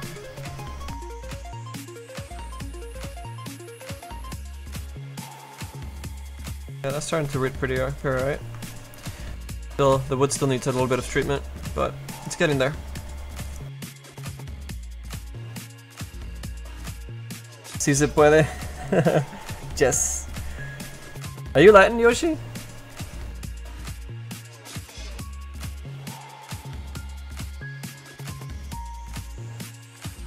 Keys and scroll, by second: 12.9 d.